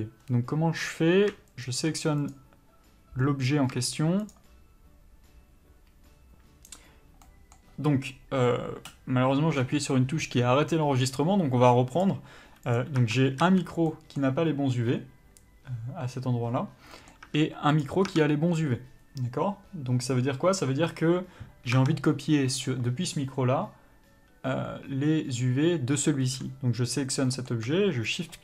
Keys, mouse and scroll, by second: 2.0 shift+click, 2.6 click, 4.0 shift+click, 7.2 middle click, 12.0 click, 12.9 Tab, 13.3 a, 16.9 middle click, 17.2 Tab, 17.7 click, 18.0 Tab, 22.6 click, 27.3 middle click, 28.1 shift+click.